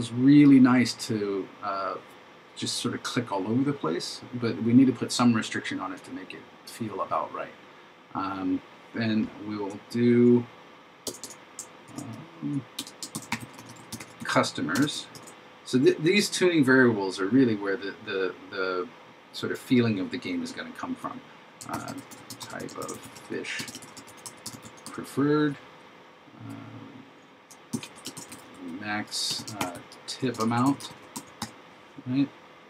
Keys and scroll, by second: 11.9 shift+0, 13.2 shift+c, 15.2 shift+9, 21.8 shift+t, 22.9 shift+f, 23.9 shift+p, 28.2 shift+m, 29.6 shift+t, 30.5 shift+a.